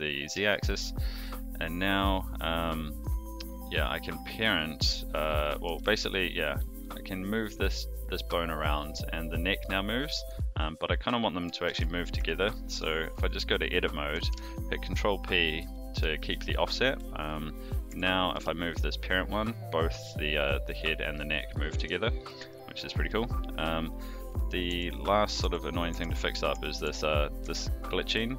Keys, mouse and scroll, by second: 0.5 shift+middle drag, 1.5 click, 3.4 click, 5.6 g, 11.6 alt+g, 12.1 Tab, 14.3 ctrl+p, 16.1 shift+click, 17.6 click, 17.8 Tab, 18.3 g, 22.5-23.0 shift+middle drag, 23.9 click, 24.6 Tab, 25.4 Tab, 26.5 Tab, 26.8 Tab, 27.4 Tab.